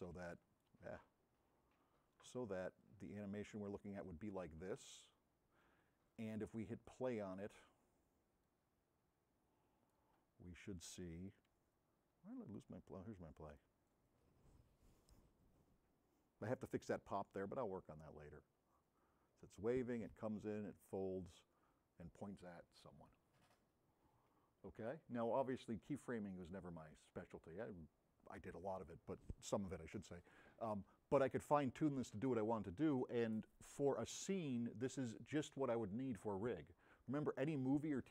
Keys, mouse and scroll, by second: 0.2 a, 0.3-0.7 right drag, 2.2 click, 2.2 s, 3.7-4.8 right drag, 5.1 middle click, 8.4-14.4 drag.